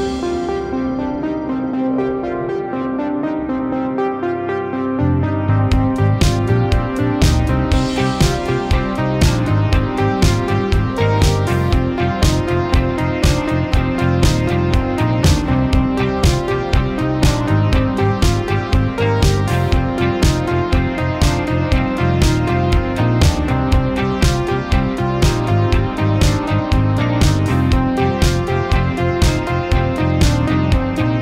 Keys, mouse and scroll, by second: 6.8-7.3 scroll down 1, 7.3 middle click, 8.7-10.0 drag, 11.3-11.9 middle drag, 12.7-13.6 drag, 16.5-17.1 click, 18.4 right click, 19.2 click, 20.8 Return, 20.9-22.1 typing, 23.1 click, 23.2-25.7 typing, 25.8 Down, 26.6 Return, 28.2 click, 30.8 space.